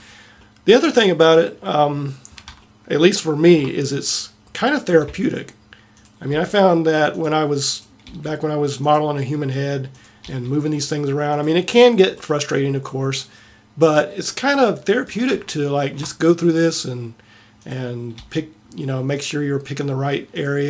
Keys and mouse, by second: 1.3 middle click, 6.0 click, 6.3 g, 8.0 g, 9.6 middle click, 18.2 g, 19.8 middle click.